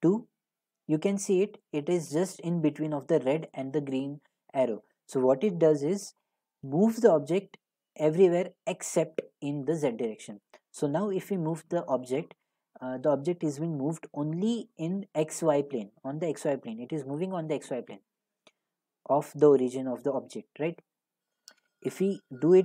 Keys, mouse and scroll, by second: 3.0 drag, 21.4-22.6 drag.